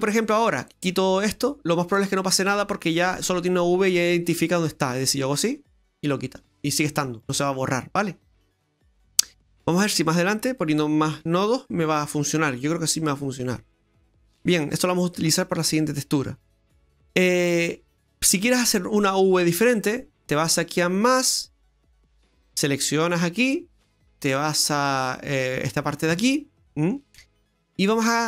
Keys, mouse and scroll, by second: 5.2 click, 7.3 scroll down 2, 7.5 middle click, 8.5-8.8 scroll down 1, 9.9 click, 11.7 middle click, 11.7 scroll down 1, 12.1-12.9 scroll up 1, 12.9 click, 14.1 scroll down 2, 14.2 middle click, 20.8 click, 22.3 click, 23.1 click, 24.8 click, 25.6-26.2 scroll down 3, 26.2 middle click, 27.1 middle click, 27.1-27.7 scroll up 1, 27.9-28.2 scroll up 3.